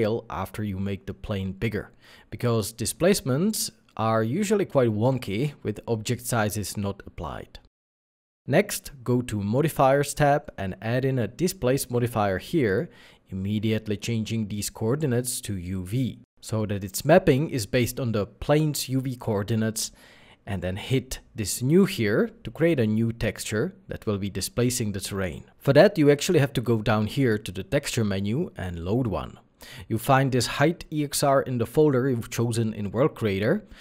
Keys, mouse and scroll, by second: 2.3 ctrl+a.